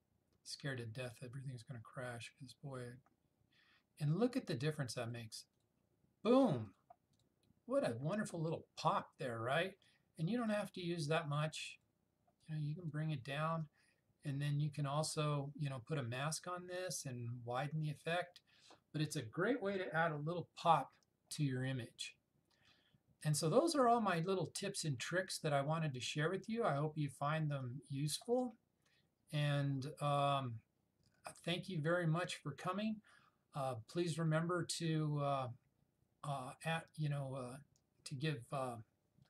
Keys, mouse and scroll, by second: 5.1 click, 10.4-12.0 drag, 27.7-28.3 drag.